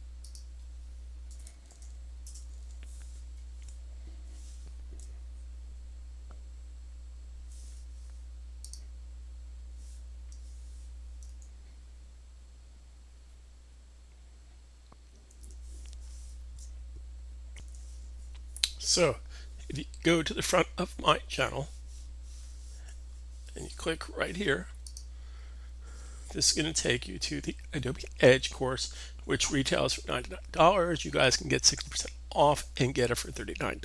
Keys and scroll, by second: 1.2 /, 1.5 super+v, 15.0 super+w, 17.6 super+w.